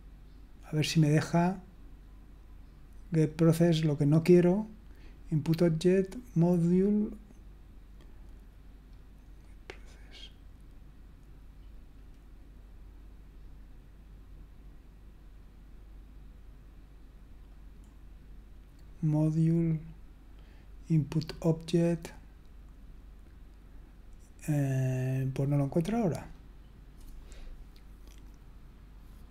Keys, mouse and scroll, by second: 6.6-7.6 scroll down 1, 7.6-8.7 scroll down 1, 8.7-10.6 scroll down 1, 10.6-17.9 scroll down 1, 17.9-19.5 scroll down 1, 19.5-22.8 scroll down 1, 22.8-24.6 scroll down 1, 24.6-26.2 scroll down 1, 26.2-29.3 scroll up 1.